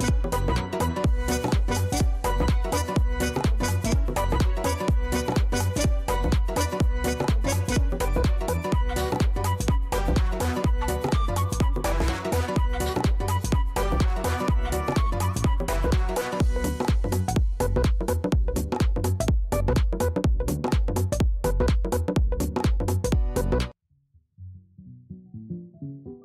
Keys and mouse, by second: 2.9 click, 7.7 click, 9.0 click, 10.4 click, 10.7 click, 11.2 click, 11.4 click, 11.8 click, 12.0 click, 12.9 click, 14.5 alt+click, 15.1 alt+click, 17.2 click, 18.7 click, 20.6 click, 23.0 click, 23.2 click, 24.9 click.